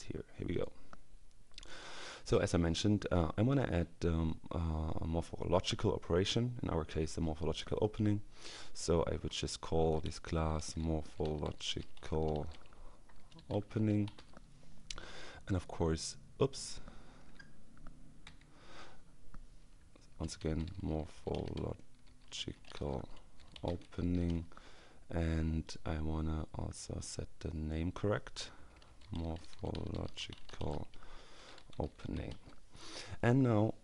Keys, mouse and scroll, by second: 0.5 click, 1.5 click, 9.2-14.7 typing, 15.5-16.1 scroll up 2, 18.3 ctrl+y, 19.9-24.8 typing, 25.7 click, 26.7-28.2 drag, 28.5-32.8 typing.